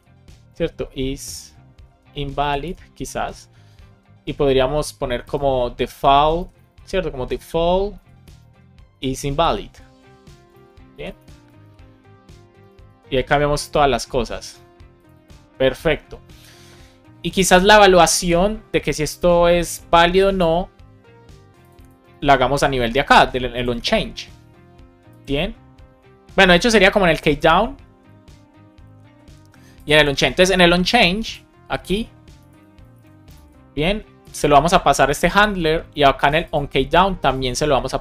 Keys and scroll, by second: 0.5 shift+i, 2.1 Down, 2.6 Return, 5.9 super+Left, 7.8 Right, 8.1 BackSpace, 8.8 shift+i, 9.6 Right, 10.4 super+Right, 10.8 Left, 11.5 super+c, 13.1 super+v, 13.6 super+s, 22.0 super+c, 32.4 space, 32.9 super+v, 33.3 super+s.